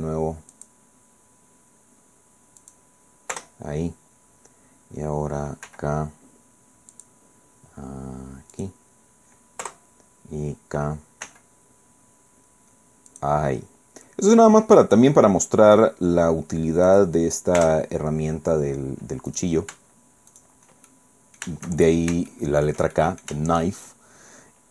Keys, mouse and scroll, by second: 0.5 click, 2.6 click, 3.3 Return, 5.6 k, 6.9 click, 8.6 click, 9.6 Return, 11.2 k, 13.1 click, 16.9 click, 17.6 Return, 19.3 click, 19.4 right click, 20.3 shift+right click, 20.9 shift+middle click, 21.8-22.1 shift+scroll down 1, 22.3 shift+middle click, 23.0 shift+middle click, 23.8 shift+scroll up 1.